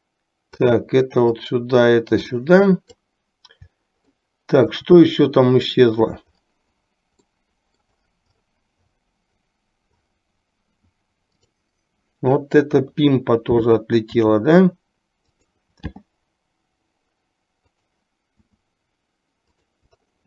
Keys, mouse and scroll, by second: 1.4 click, 1.7-3.2 drag, 4.2-4.9 shift+middle drag, 7.4-8.2 middle drag, 11.5 drag, 12.9 KP_3, 14.2 s, 16.1 g, 18.5 s.